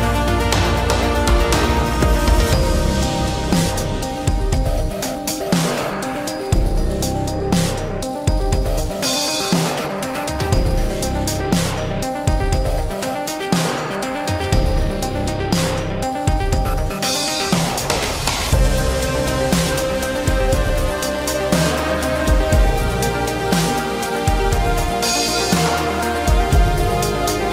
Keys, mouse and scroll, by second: 9.6 shift+middle click, 11.1 space, 16.1 shift+middle click, 24.3 s.